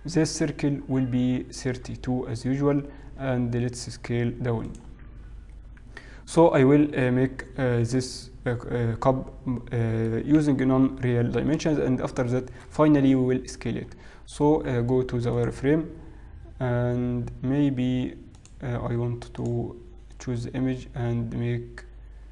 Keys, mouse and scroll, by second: 0.2-1.6 scroll down 4, 1.6 scroll down 3, 1.9-2.2 scroll down 1, 3.1-4.7 scroll down 1, 4.7 s, 5.4-7.2 scroll up 1, 8.0 middle click, 10.5 KP_1, 11.5-13.4 scroll down 3, 13.5 scroll up 1, 15.7 z, 18.4 click, 19.4 click, 20.3-20.7 scroll down 5.